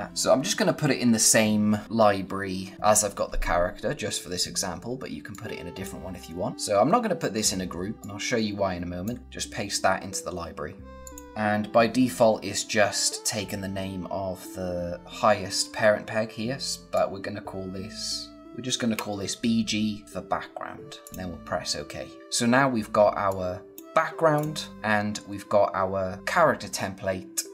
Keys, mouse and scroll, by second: 0.1-0.5 scroll down 1, 4.1 scroll up 1, 5.2 click, 6.5 click, 9.2 v, 10.9 click, 16.8 click, 20.9 click, 23.2 click.